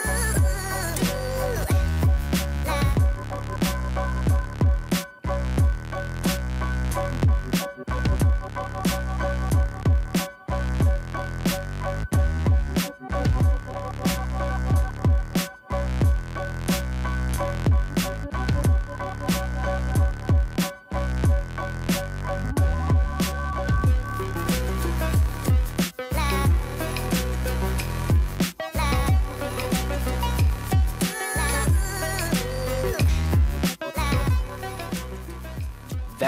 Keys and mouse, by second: 0.4 drag, 0.8 middle click, 1.3 r, 1.7 r, 6.8 right click, 7.5 middle click, 8.1 middle drag, 8.5 right click, 12.0 click, 13.2 click, 13.8 right click, 14.1 r, 17.2 right click, 17.7 right click, 19.1 click, 19.3 click, 20.2 right drag, 20.6 right click, 21.5-23.1 shift+drag, 23.6-24.9 shift+drag, 25.3 shift+click, 26.3 shift+click, 27.9 right click, 28.2 r, 28.4 right click, 28.4 r, 28.7 r, 29.1 right click, 29.1 r, 29.4 click, 29.8 click, 30.5 right click, 30.9 r, 34.2 right click, 34.9 middle drag, 35.1-35.4 middle drag, 35.8 middle click.